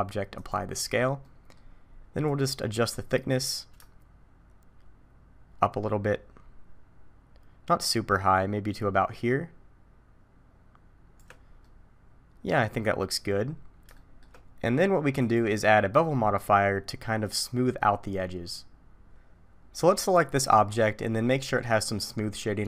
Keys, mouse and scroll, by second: 1.2 middle click, 2.3 click, 11.6 middle click, 13.3 scroll down 1, 13.5-14.0 scroll up 2, 14.0 shift+middle click, 15.2 click.